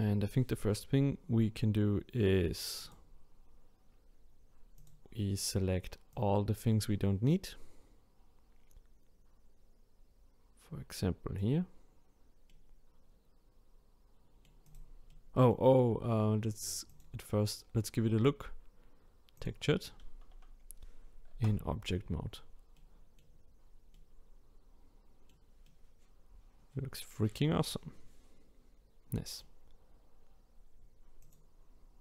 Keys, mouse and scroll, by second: 0.5-1.5 scroll up 1, 2.8-6.2 drag, 12.5-14.6 middle drag, 14.6 click, 15.1-16.9 middle drag, 16.9 click, 17.8-19.8 scroll up 4, 19.8 click, 20.8 scroll up 1, 21.7 Tab, 22.7-23.3 middle drag, 23.3 scroll up 2, 23.9-30.7 middle drag, 31.2 click.